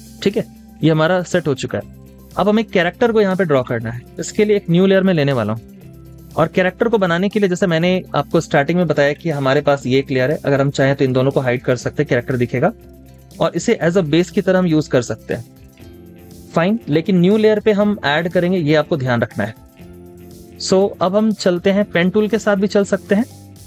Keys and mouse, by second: 11.3 double click, 14.1 typing, 16.8 typing, 16.9 double click.